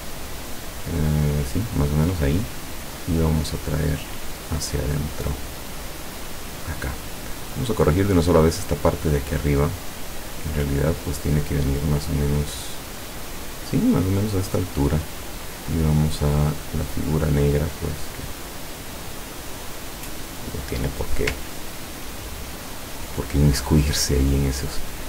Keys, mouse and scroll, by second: 2.9-7.1 drag, 7.6 click, 9.1-14.6 drag, 15.5 click, 16.9 click, 17.7 click, 19.4-20.6 drag, 21.7-22.3 ctrl+scroll up 4.